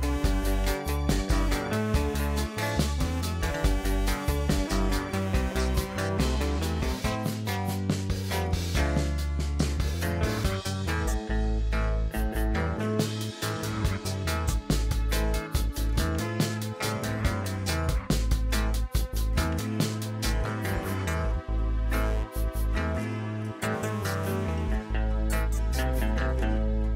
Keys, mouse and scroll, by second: 0.7 scroll down 3, 1.6-4.1 right drag, 4.6-7.6 middle drag, 7.6 e, 13.1-13.6 scroll down 3, 13.6-15.4 middle drag, 15.4 s, 19.3-20.6 middle drag, 20.6 e.